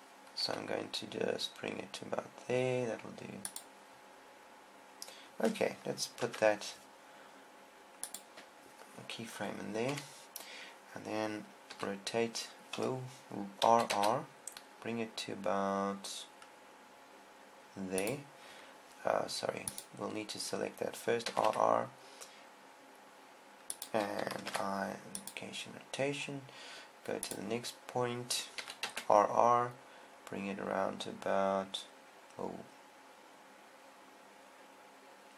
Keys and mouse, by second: 0.9 r, 1.0 r, 4.0-5.8 drag, 6.6 i, 8.7 i, 10.4 KP_7, 12.3 r, 14.3 r, 18.7 click, 20.1-21.9 drag, 21.7 r, 24.5 click, 25.0 i, 25.8 click, 25.8 i, 26.8-29.9 drag, 29.1 r.